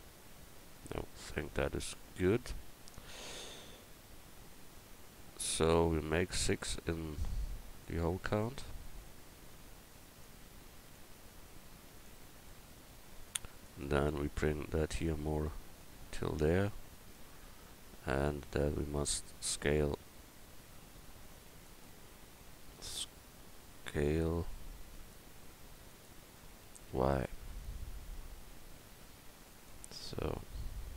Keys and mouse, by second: 0.9-5.6 middle drag, 7.8-10.2 drag, 10.9 click, 12.1-12.7 right drag, 12.7 middle click, 13.0 click, 13.6-16.3 right drag, 14.4 click, 16.9-19.1 right drag, 18.3-19.5 drag, 19.5 w, 20.9 w, 23.0 w, 26.6 s, 30.0 q, 30.0 a.